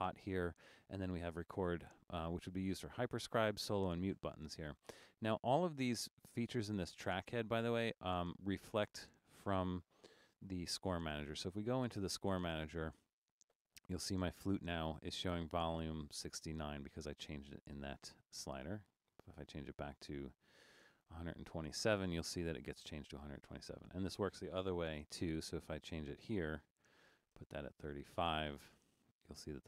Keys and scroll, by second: 11.3 super+k, 21.7 super+k, 26.1-27.2 typing.